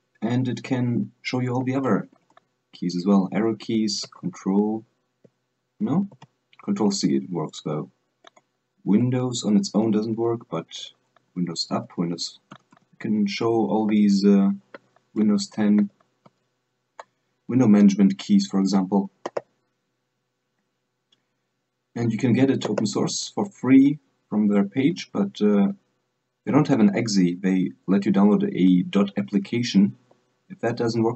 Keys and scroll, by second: 1.7 Right, 2.1 Left, 2.4 Up, 2.4 Down, 6.3 ctrl+c, 11.5 super+Up, 11.9 super+Left, 12.7 super+Right, 12.9 super+Right, 13.6 super+Up, 14.0 super+Left, 14.9 super+Left, 15.7 super+Down, 16.0 super+Left, 16.5 super+Right, 23.0 alt+space, 26.6 alt+space.